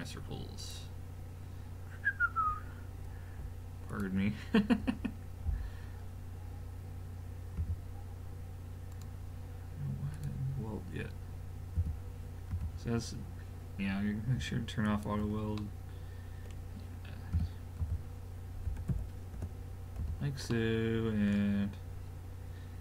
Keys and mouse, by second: 3.9 click, 4.8 l, 7.6 g, 10.1 click, 11.8 g, 15.6-17.3 middle drag, 17.3 g, 20.0 a, 20.5 middle click, 20.8 middle click.